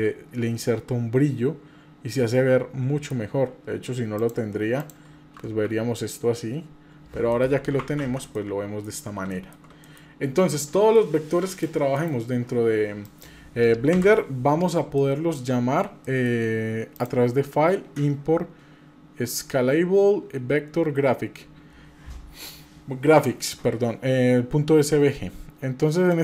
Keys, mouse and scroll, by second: 4.2 click, 4.8 click, 7.3 middle click, 8.0 ctrl+z, 8.3 middle click, 9.0 scroll up 2, 9.3 shift+middle click, 9.8 middle click, 10.3-11.5 scroll down 4, 10.6 middle click, 11.5 click, 12.0 KP_Divide, 12.6-13.0 scroll up 2, 13.0 click, 13.9 Delete, 14.3-15.0 scroll up 3, 15.0 shift+middle click, 16.1 middle click, 17.0-25.2 drag.